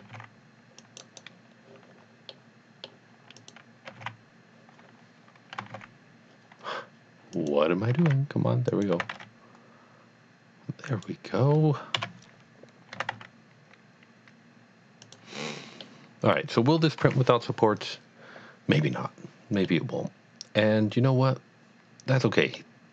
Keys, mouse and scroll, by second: 0.0 g, 0.3 x, 0.8 click, 1.1 right click, 2.3 middle click, 2.6 middle click, 3.5 click, 3.9 g, 4.0 x, 5.6 g, 5.7 x, 7.4 click, 7.9 g, 8.4 x, 8.8 click, 9.0 g, 9.7 y, 10.9 click, 12.0 KP_7, 12.9 g, 14.4 y, 15.0 click, 15.8 middle click, 17.1 KP_3, 19.6 KP_3, 19.8 middle click, 20.2 middle click.